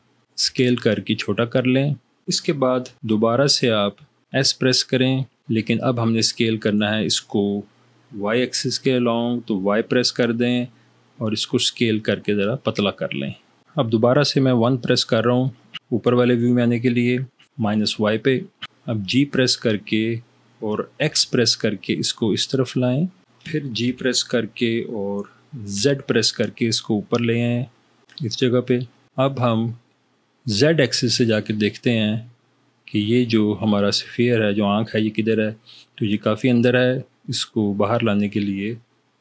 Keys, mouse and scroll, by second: 0.7 s, 4.5 s, 9.7 y, 14.7 1, 19.2 g, 21.0 x, 24.1 g, 25.8 z.